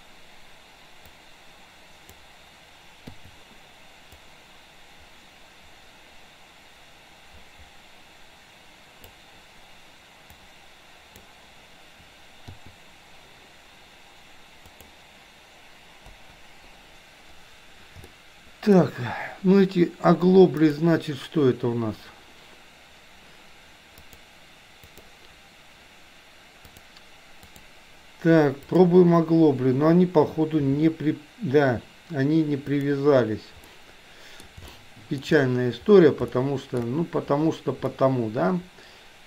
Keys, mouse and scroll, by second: 1.2-2.3 drag, 4.3-9.2 drag, 10.4 click, 14.8 click, 16.2 BackSpace, 18.2-18.9 shift+middle drag, 20.8 click, 24.0-25.2 drag, 26.9 click, 28.8 click, 30.8 r, 33.8-34.5 middle drag, 34.8 shift+middle click, 36.4-37.0 shift+middle drag, 38.0-39.2 middle drag.